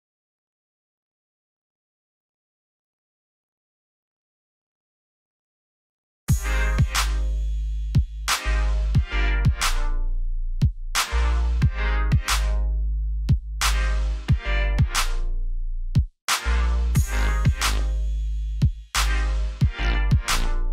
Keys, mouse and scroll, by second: 3.4 alt+scroll up 1, 4.1 alt+scroll down 1, 4.9 click, 6.0 ctrl+shift+s, 9.4 click, 18.3 right click, 19.8 click.